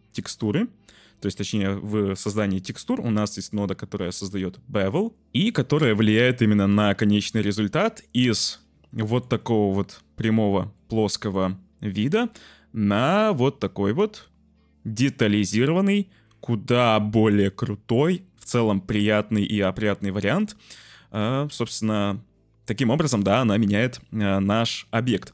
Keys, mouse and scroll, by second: 6.5 click, 8.4 click, 9.0 shift+click, 10.8 middle click, 12.0 middle click, 13.1-14.0 drag.